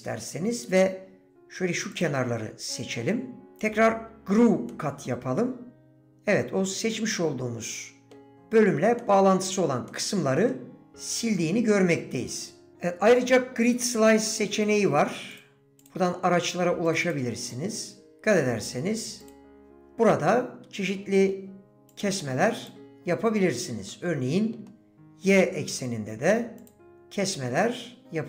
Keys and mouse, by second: 4.7-8.1 drag, 8.3 click, 9.0 click, 9.9 click, 19.7-21.3 middle drag, 23.9 middle click, 26.6 click, 27.6 middle click.